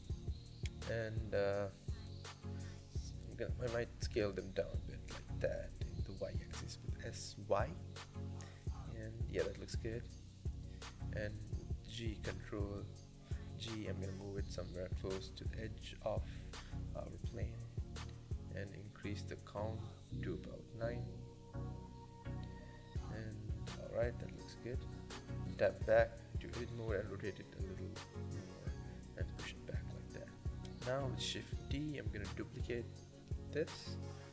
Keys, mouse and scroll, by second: 0.1 middle click, 0.6 KP_0, 2.4 s, 8.5 middle click, 8.9 scroll down 5, 9.2 middle click, 9.8 KP_7, 10.3 scroll up 1, 10.5 shift+middle click, 10.8 scroll up 1, 11.0 shift+middle click, 11.4 g, 14.3 scroll down 3, 14.6-16.4 middle drag, 16.4 Tab, 17.1 click, 18.1-19.6 drag, 19.6-21.4 middle drag, 21.4 KP_0, 22.3-23.1 shift+middle drag, 23.1-23.6 scroll up 1, 23.6-24.0 shift+middle drag, 24.0-24.5 scroll down 1, 24.5 click, 24.8 Tab, 25.7 r, 27.3 g, 31.2 shift+d, 31.9-33.9 scroll down 1, 33.9 p.